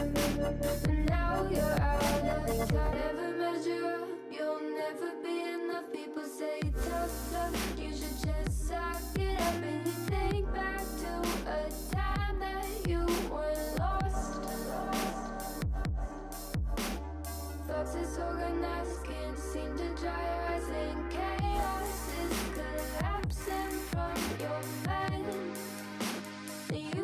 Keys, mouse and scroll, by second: 0.1 middle click, 0.3-0.8 scroll up 2, 0.8 s, 3.6-3.9 scroll down 3, 3.9-4.7 middle drag, 4.7 x, 5.7 alt+z, 6.3 click, 6.7 alt+z, 7.1 ctrl+l, 7.7-8.4 middle drag, 8.4 click, 8.5-9.4 middle drag, 9.4-10.0 scroll up 1, 10.0 click, 10.6 ctrl+l, 11.1 x, 12.0 alt+z, 12.5 KP_1, 13.0 KP_3, 13.4 shift+middle click, 13.6-14.0 scroll up 3, 14.0 1, 14.3 click, 14.8-15.4 shift+middle drag, 15.4 shift+drag, 16.5 scroll down 3, 16.6-17.0 middle drag, 17.0 alt+z, 17.4 middle click, 17.5 alt+z, 17.7 3, 17.9 shift+middle click, 18.1 scroll up 2, 18.2 scroll down 1, 18.4 shift+s, 19.4 shift+d, 20.0 shift+middle click, 20.2 scroll up 1, 20.4 alt+z, 20.7 middle click, 21.2-21.5 scroll up 1, 21.5 alt+e, 23.3 alt+z, 23.9 ctrl+z, 24.5 alt+e.